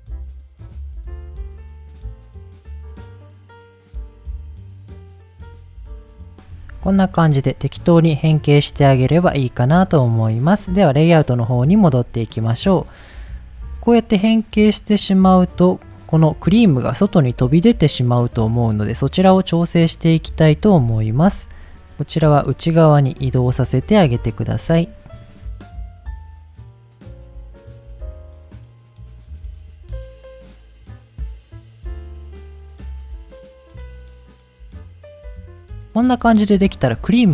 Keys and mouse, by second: 0.0 click, 0.2 click, 0.6 click, 0.8 click, 1.1 click, 1.7 click, 2.1 middle click, 2.3 click, 2.5 click, 2.7 click, 3.1 middle click, 3.2 click, 3.6 middle click, 3.7 click, 4.2 middle click, 4.3 click, 4.5 middle click, 4.8 click, 5.2 click, 5.5 middle click, 5.6 click, 5.9 middle click, 6.0 click, 6.2 middle click, 7.4 middle click, 8.2 middle click, 8.6 middle click, 9.1 middle click, 14.0 middle click, 15.3 click, 16.2 middle drag, 16.7 click, 17.1-17.8 middle drag, 18.4-18.8 middle drag, 20.2 click, 20.7 click, 21.2 Tab, 21.7 middle click, 21.9 g, 22.2 click, 22.4 g, 22.8 click, 23.7 click, 24.4 click, 25.0 click, 25.0-30.9 typing, 25.5 click, 25.7 click, 26.5 click, 26.7 click, 27.1 click, 27.4 click, 27.7 click, 28.3 click, 28.6 click, 29.0 click, 29.5 click, 29.7 click, 29.9 click, 30.2 click, 30.8 click, 31.4 click, 31.5 click, 32.0-35.5 typing, 32.7 click, 32.8 click, 33.2 click, 33.6 click, 33.7 click, 34.3 click, 35.2 click, 35.7 click, 35.8 middle click, 35.9 click, 36.2-36.5 middle drag, 36.8 click, 37.2 middle drag.